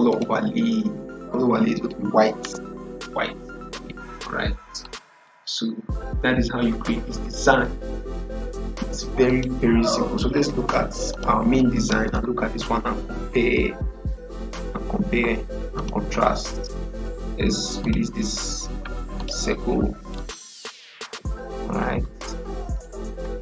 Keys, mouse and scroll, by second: 0.0 click, 4.7 click, 4.7 click, 9.2 click, 15.6 click, 18.6-19.1 scroll up 1, 19.1 click, 22.6 click.